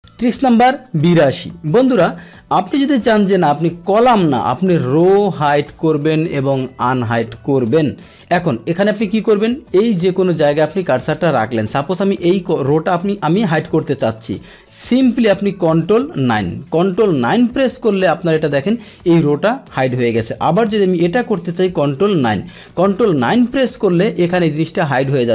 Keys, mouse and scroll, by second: 9.3 click, 9.9 click, 10.3 click, 10.7 click, 11.5 click, 16.2 ctrl+9, 20.5 click, 22.1 ctrl+9.